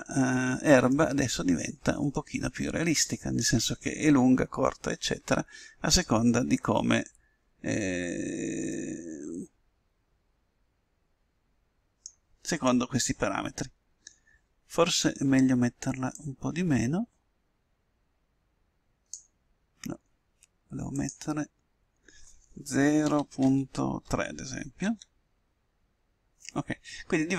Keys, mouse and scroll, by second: 2.5-4.0 middle drag, 6.8-9.2 middle drag, 9.8-11.4 middle drag, 17.4-19.0 drag, 22.2-23.8 drag.